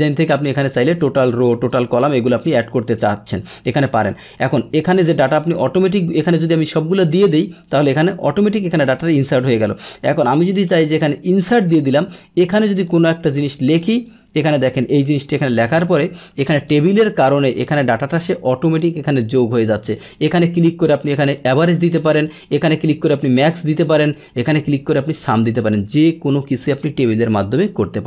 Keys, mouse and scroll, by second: 1.1 click, 1.7 click, 2.2 click, 5.3 click, 6.1 click, 7.7 click, 9.7 right click, 10.9 click, 12.4 click, 13.9 click, 15.4 BackSpace, 16.6 click, 17.4 click, 19.8 click, 21.4 click, 22.1 click, 22.9 click, 23.7 click, 25.0 click, 27.2 middle click.